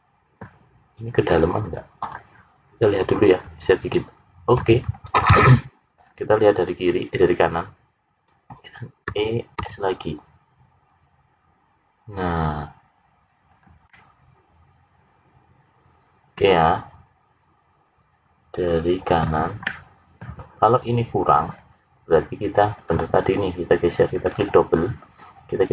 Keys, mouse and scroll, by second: 1.9 click, 3.4 click, 9.0 e, 13.8 middle click, 19.6 middle click, 22.7 click, 24.1 click, 24.6 click.